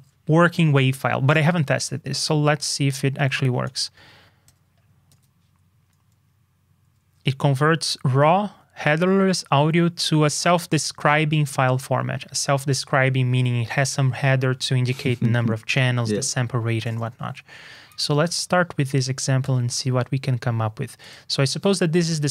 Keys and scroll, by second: 5.0 super+c, 17.8 super+c, 18.2 super+j.